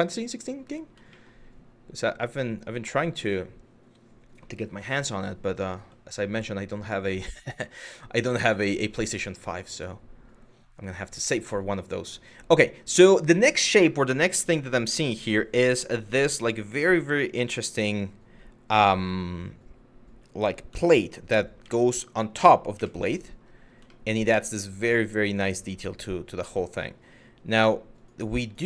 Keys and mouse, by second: 0.8 shift+middle click, 20.4 shift+middle drag, 22.4 KP_1, 23.6 shift+middle click, 27.6 click, 28.0 click, 28.5 click.